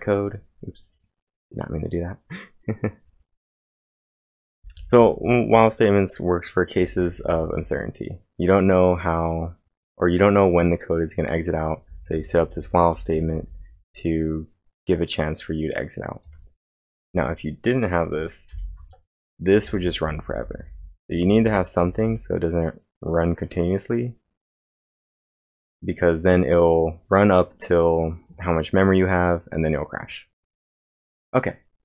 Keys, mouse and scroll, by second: 3.4-5.5 typing, 3.6 click, 3.6 click, 6.8-8.0 typing, 9.3-10.0 typing, 11.9-13.7 typing, 16.2-17.1 typing, 18.5 ctrl+/, 21.0-22.5 typing.